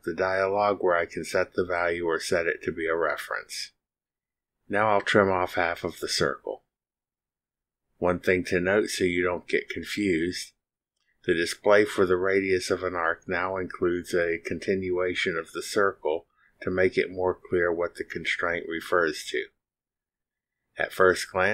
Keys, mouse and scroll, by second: 2.0 click, 6.3 click, 10.4 click, 11.4 click, 14.5 click, 16.5 click, 18.6 click.